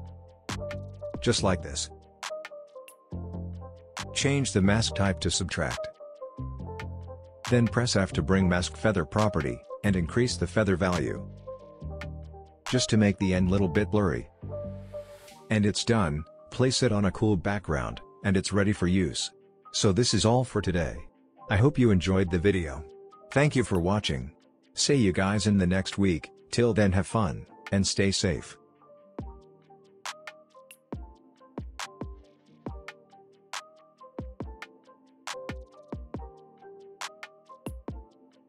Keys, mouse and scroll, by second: 6.1 scroll up 1, 7.2 s, 8.3 f, 10.1-13.8 drag, 15.3 typing, 15.9 scroll down 1, 22.3 space, 22.9 click.